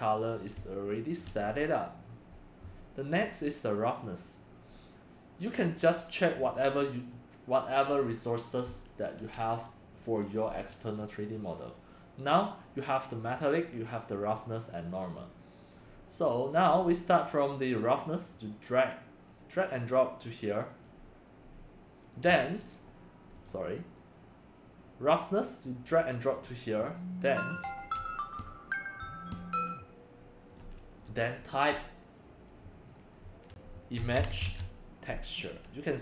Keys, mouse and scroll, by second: 0.4 middle click, 1.5 click, 3.2 click, 5.9 click, 8.3-10.3 drag, 11.3 click, 12.2 click, 13.3 click, 14.3 click, 15.1 click, 15.7 click, 18.5-19.5 drag, 19.9-21.0 drag, 21.4 scroll down 2, 22.8 click, 23.4 click, 25.8-26.3 drag, 26.4 click, 27.7-28.9 drag, 29.0-33.1 drag, 34.1-34.4 typing.